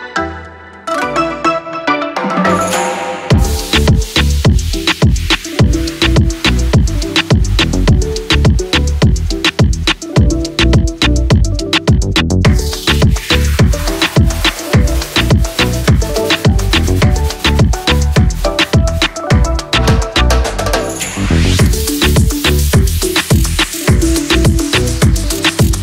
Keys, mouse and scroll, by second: 1.9 ctrl+shift+l, 2.4 ctrl+z, 5.8 ctrl+shift+l, 7.4 click, 12.4-25.8 drag, 12.8 typing, 17.0 typing.